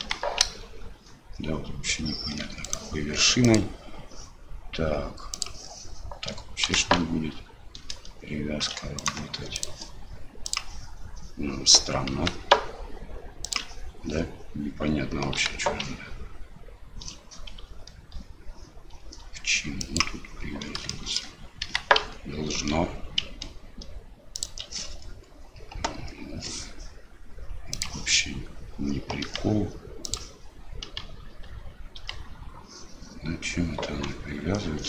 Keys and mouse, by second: 0.0 g, 3.4-5.9 drag, 6.6 g, 9.5-10.8 drag, 12.1 g, 21.0 shift+click, 27.8 click, 32.0 g.